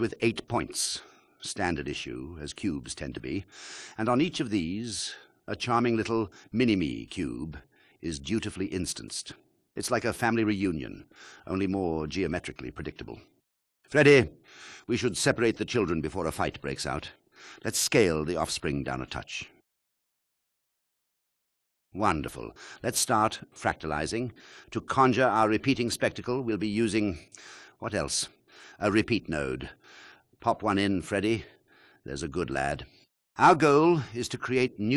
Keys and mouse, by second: 18.0-23.0 drag, 27.7 click, 32.2 shift+a.